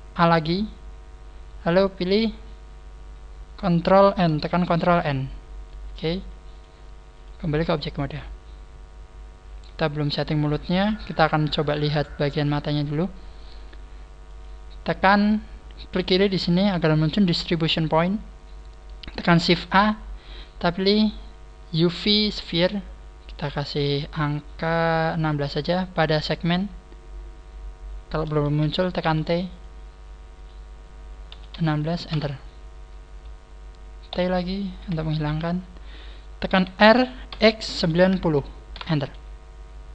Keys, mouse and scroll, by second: 1.5 a, 4.8 ctrl+n, 6.5 click, 7.2 click, 7.6 middle click, 10.4 scroll down 1, 11.6-11.9 scroll down 1, 11.6 KP_1, 12.1-12.7 scroll up 3, 13.6 scroll up 1, 14.2 click, 20.3 shift+a, 22.4 click, 22.4 scroll up 1, 24.0-24.6 scroll down 6, 24.4 scroll up 3, 25.6 scroll up 3, 28.6 t, 29.4 click, 31.0 click, 34.1 t, 34.8 t, 35.4-36.3 scroll down 4, 35.4 t, 36.5 r.